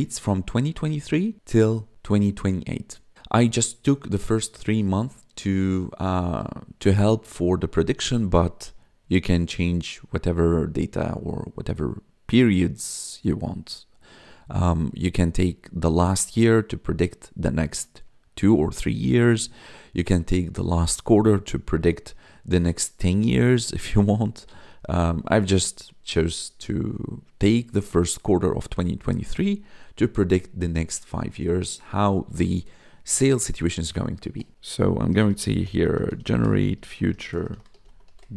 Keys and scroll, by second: 34.5-38.3 typing.